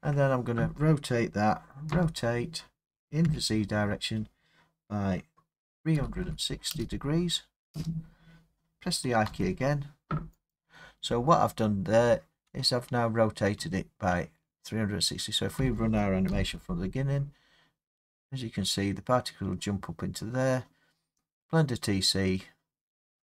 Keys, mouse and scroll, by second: 1.9 r, 3.3 z, 6.0-6.7 typing, 7.7 Return, 9.3 i, 10.5 click, 13.6 space, 16.3 Left.